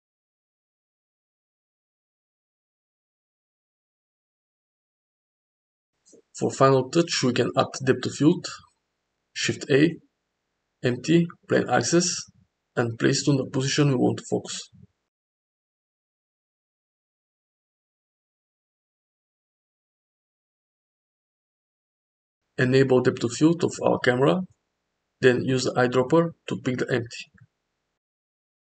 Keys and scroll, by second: 0.0 s, 4.3 g, 4.6 z, 9.0 shift+a, 12.6 g, 13.7 g, 15.5 z, 16.3 g, 19.7 KP_0.